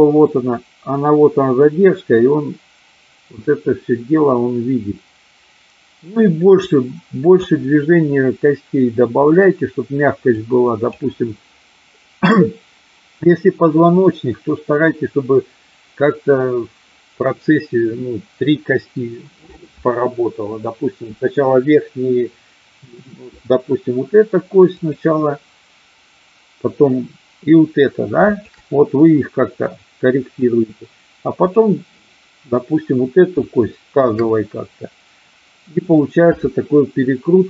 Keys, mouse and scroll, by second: 10.3 click, 24.8-25.7 drag, 28.3-29.2 shift+drag, 31.4-32.4 drag, 33.9-35.1 shift+drag.